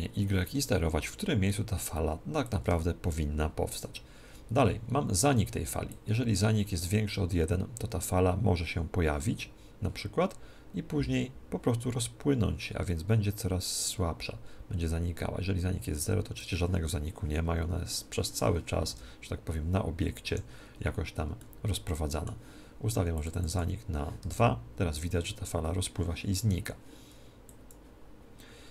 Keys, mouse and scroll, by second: 2.4 click, 5.9 click, 18.9 alt+a, 20.3 Escape, 21.3-23.1 middle drag, 23.1 click, 24.3 alt+a, 25.3 alt+a, 26.3 Escape, 27.5-28.7 drag.